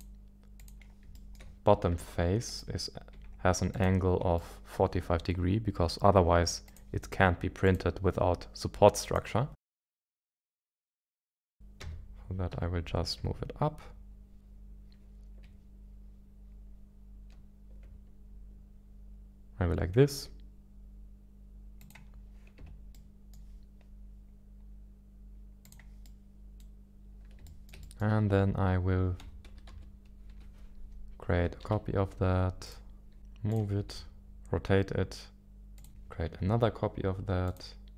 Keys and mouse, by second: 0.6 click, 1.4 shift+middle click, 2.0 Tab, 3.1 Tab, 3.7 click, 4.3 middle click, 6.6-7.7 drag, 9.0 click, 10.0 KP_1, 11.3 shift+middle click, 11.8 g, 12.5 z, 21.8 click, 22.6 Tab, 22.9 middle click, 25.6 click, 26.0 middle click, 27.4 shift+middle click, 27.8-29.7 middle drag, 29.7 KP_1, 30.3 KP_7, 31.6 shift+d, 32.6 click, 33.2 ctrl+z, 33.5 ctrl+click, 33.9 g, 35.8 click, 35.9 shift+d, 37.5 click.